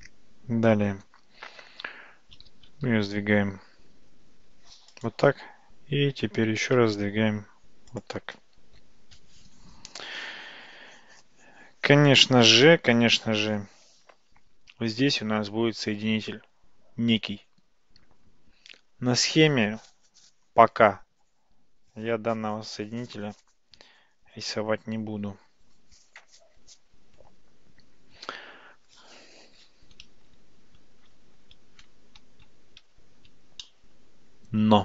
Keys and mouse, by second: 2.5 g, 6.5 g, 33.7-34.8 shift+middle drag.